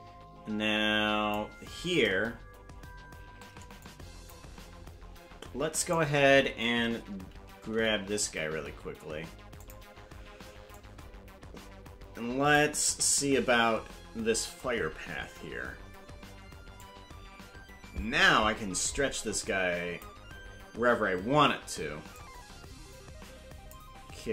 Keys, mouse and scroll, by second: 3.9 click, 5.8 right click, 7.7 g, 10.8-12.6 drag, 12.9 KP_0, 16.8-20.1 drag, 22.1-23.8 drag.